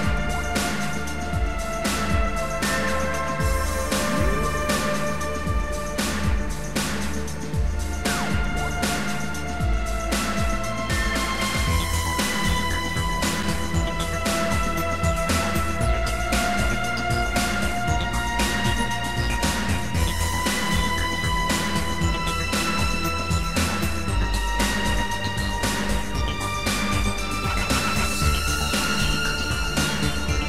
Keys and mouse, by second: 1.8 click, 4.1 click, 6.0 click, 10.6 click, 16.4 click, 18.1 Delete, 19.8 click, 22.0 click, 24.3 click, 25.9 click.